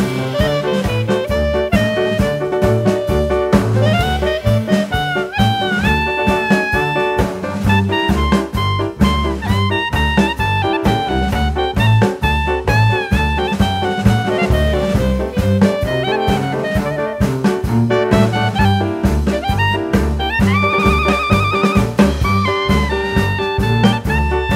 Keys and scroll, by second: 1.9 g, 5.2 s, 10.3 s, 11.6 g, 14.0 s, 15.6 g, 17.9 g, 20.2 ctrl+z, 22.0 s, 24.0 g.